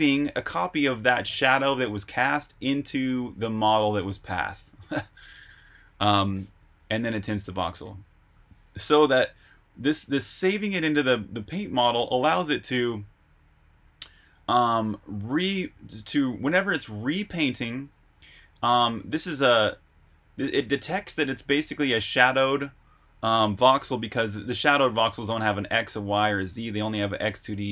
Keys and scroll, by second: 6.9 Escape, 7.0-9.9 typing, 11.6 Escape, 11.7-13.6 typing, 15.5-19.6 typing, 21.2 j, 24.3 Escape, 25.0 k, 25.8 shift+v, 26.6 Escape.